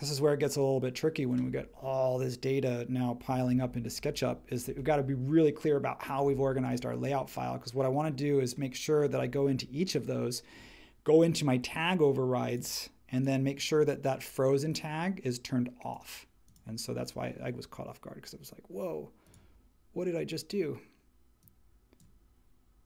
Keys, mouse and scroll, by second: 3.5 super+h.